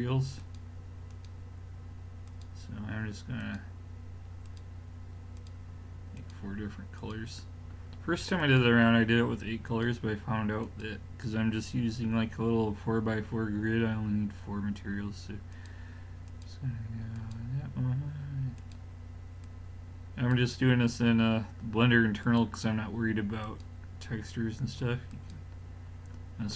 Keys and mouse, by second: 15.6-20.5 drag, 22.3-25.3 drag.